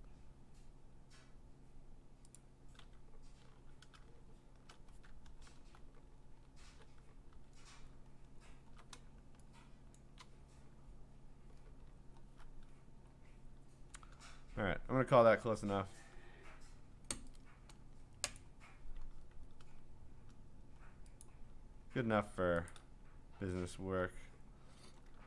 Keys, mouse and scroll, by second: 0.6-1.4 scroll, 2.4 click, 3.6 g, 4.2-5.3 scroll, 5.4 alt+BackSpace, 6.2 ctrl+BackSpace, 7.9-8.9 scroll, 10.0 click, 11.9 scroll, 13.1 scroll, 13.6 scroll down 3, 14.2-14.9 scroll down 6, 15.5 ctrl+s, 18.4 click, 19.3-20.2 scroll, 21.2 click, 21.4-22.7 scroll, 23.7-25.1 scroll.